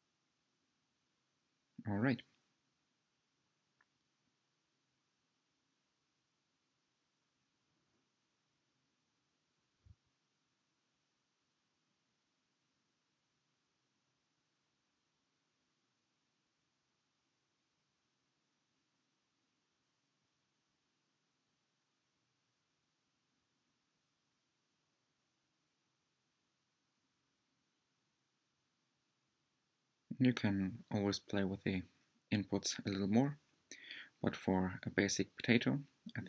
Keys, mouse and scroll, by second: 2.5-5.4 drag, 8.8 scroll down 2, 9.4-11.4 middle drag, 11.4 ctrl+shift+click, 15.5 ctrl+shift+click, 17.0-19.6 middle drag, 19.6 click, 20.1 middle click, 20.9 scroll up 2, 21.7-25.1 shift+middle drag, 25.1 click, 29.8-30.2 scroll down 3, 30.4-33.5 middle drag.